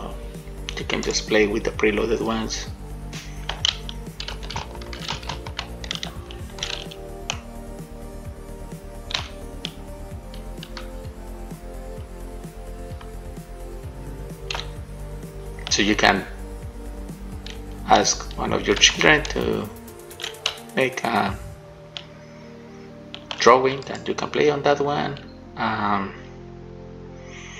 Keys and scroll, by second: 5.4 shift+d, 7.1 a, 9.3 w, 14.7 shift+a, 18.6-19.6 typing, 20.6 shift+a.